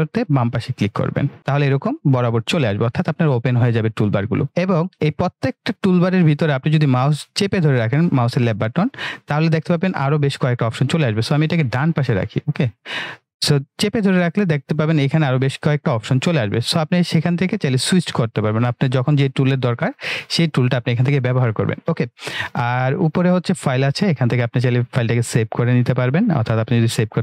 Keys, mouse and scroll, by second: 0.5 click, 2.1 click, 8.6-12.7 drag, 23.4 click.